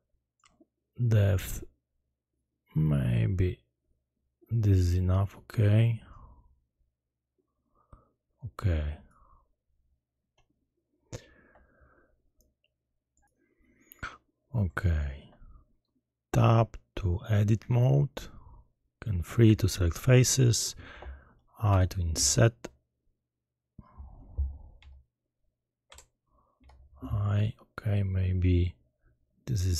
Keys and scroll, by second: 17.5 Tab, 19.4 3, 21.7 i, 25.8 Escape, 26.5 i.